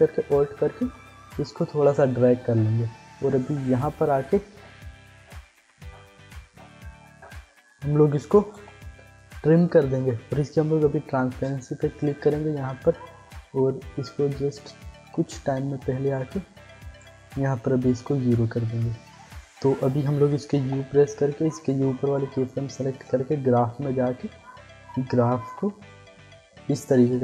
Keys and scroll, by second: 8.5 alt+], 10.6 t, 20.6 u.